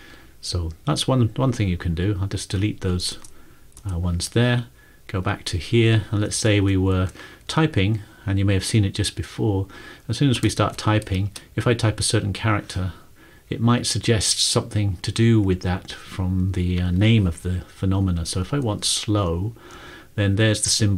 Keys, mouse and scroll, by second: 0.0-0.5 typing, 3.2 BackSpace, 3.7 BackSpace, 5.1 click, 6.3 BackSpace, 6.7 BackSpace, 6.9 BackSpace, 9.2 typing, 10.2-11.9 typing, 13.9 Down, 14.0 Down, 14.6 Up, 15.1 Up, 15.4 Down, 15.6 Down, 18.7 Up, 18.8 Up, 19.7 Return.